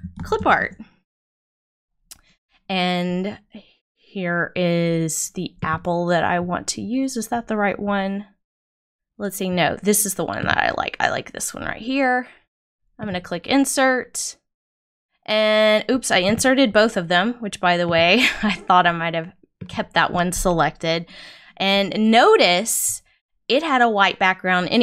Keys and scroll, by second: 0.5 Return.